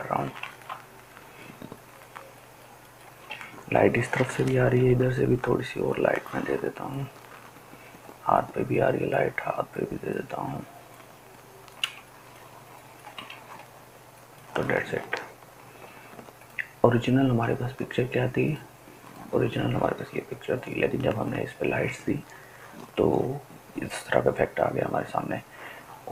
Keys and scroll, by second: 4.5 ], 4.9 ], 5.1 ].